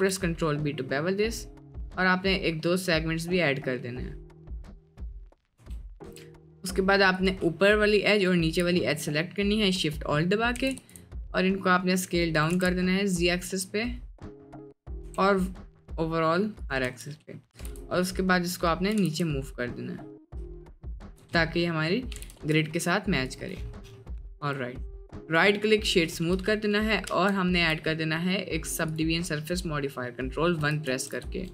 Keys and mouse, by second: 5.6 Tab, 6.0 Tab, 7.2 alt+click, 8.1 alt+shift+click, 10.7 s, 12.6 s, 15.0 s, 16.9 Tab, 17.6 g, 18.9 g, 22.2 g, 24.3-24.8 middle drag, 24.9 click, 25.2 middle click, 27.1 ctrl+1, 29.0 click, 30.9 ctrl+1, 31.2 Tab.